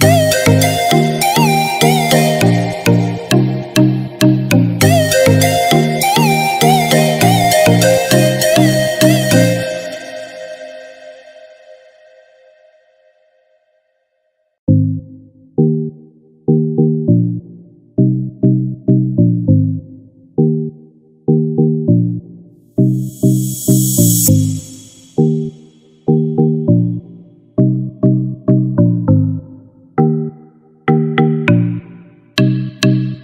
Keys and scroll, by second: 4.4 ctrl+-, 5.3 ctrl+=.